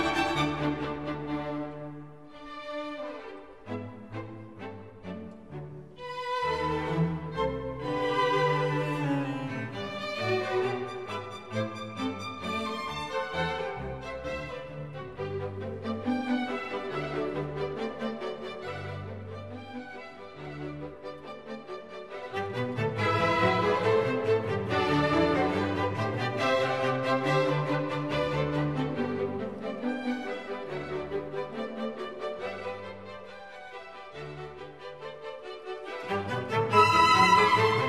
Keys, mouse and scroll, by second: 8.7 right click, 11.9 double click.